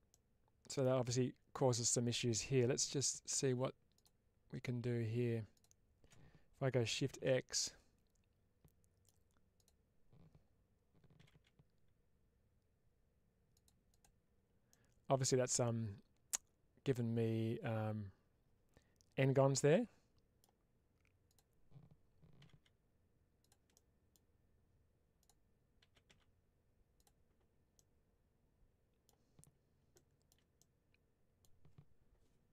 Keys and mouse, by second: 0.0 middle click, 2.7 1, 2.8 click, 7.0 shift+x, 7.5-8.9 middle drag, 9.5 click, 13.4 click, 13.8 click, 14.6 middle click, 19.5 middle click, 21.1 click, 23.3 click, 23.6 middle click, 26.8 click, 27.6-28.9 middle drag, 29.9 shift+middle click, 30.4 middle click.